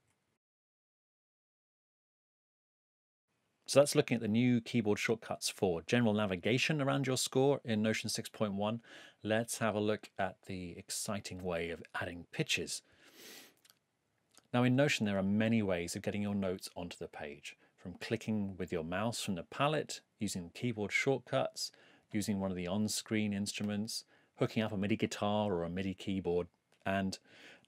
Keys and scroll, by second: 0.3 Left.